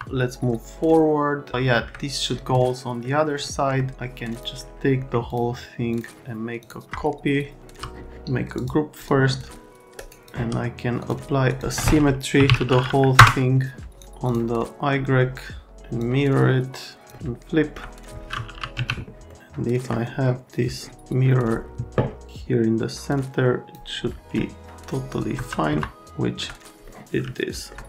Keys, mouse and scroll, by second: 0.5 right click, 3.0 right click, 3.5 right click, 4.3 click, 5.3 click, 5.9 click, 6.6 click, 8.6 click, 9.0 click, 9.8 click, 11.0 click, 11.5 click, 12.1-13.0 typing, 13.2 Return, 13.9 click, 14.3 click, 16.0 click, 17.1 alt+middle click, 18.3-19.2 typing, 19.3 scroll down 1, 22.3 click, 24.4 alt+middle click, 25.4 F3, 25.7 F3, 26.1 alt+middle click, 26.8 middle click.